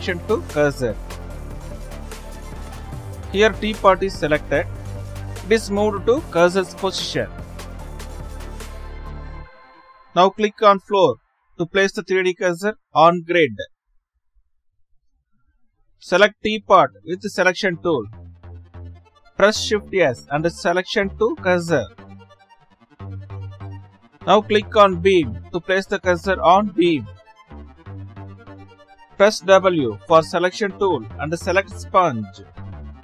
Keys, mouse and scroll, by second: 1.2 shift+s, 8.1-9.1 drag, 10.1 click, 11.4 click, 14.3 click, 15.8 click, 17.5-18.8 drag, 23.4 shift+s, 24.9-25.8 middle drag, 25.8-30.1 drag, 30.1 shift+s, 32.5 w.